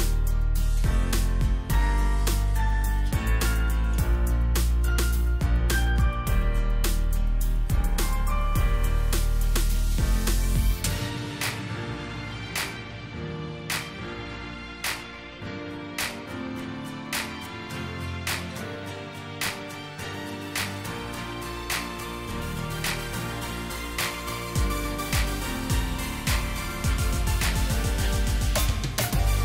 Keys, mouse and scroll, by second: 2.2 alt+click, 4.8 Delete, 11.0 alt+scroll up 1, 12.9 ctrl+c, 13.9 ctrl+f, 18.2 ctrl+c, 19.1 ctrl+f, 19.7 alt+shift+click.